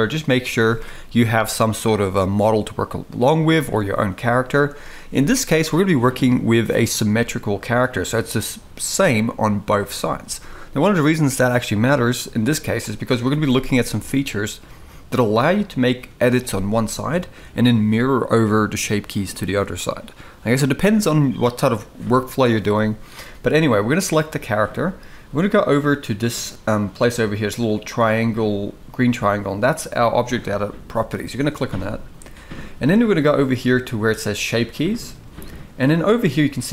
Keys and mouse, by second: 24.2 shift+middle click, 31.1 click, 34.2 click, 36.6 click.